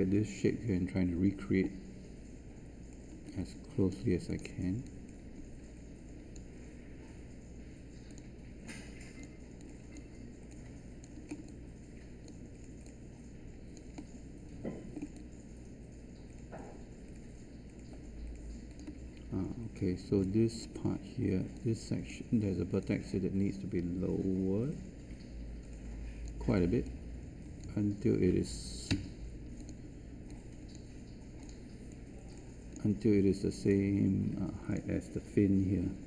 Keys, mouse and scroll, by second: 28.8 z.